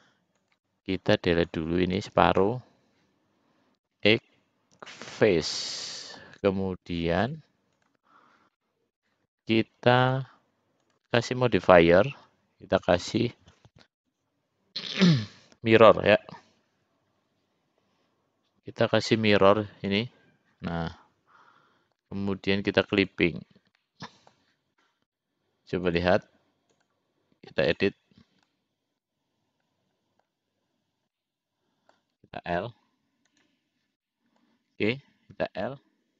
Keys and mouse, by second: 0.6 click, 1.7-2.7 drag, 4.1 x, 5.6 middle click, 7.4 click, 8.7 middle click, 10.2 click, 11.0-20.3 drag, 20.9-22.2 middle drag, 23.2 click, 24.0 middle click, 26.0 click, 26.9-28.1 drag, 28.6-30.5 middle drag, 31.3 middle click, 33.6 click, 34.2 middle click, 35.6 l.